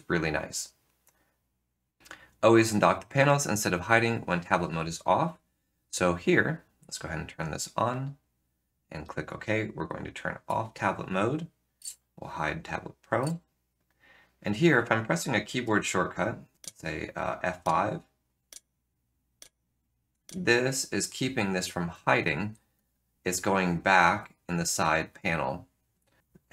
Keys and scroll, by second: 10.2 Tab, 11.7 shift+super+z, 13.3 shift+super+d, 16.5 F5, 17.6 F5, 18.5 F5, 19.3 F5, 20.2 F5, 21.1 F5, 22.0 F5, 22.8 F5, 24.5 F5, 25.0 F5, 26.2 F3.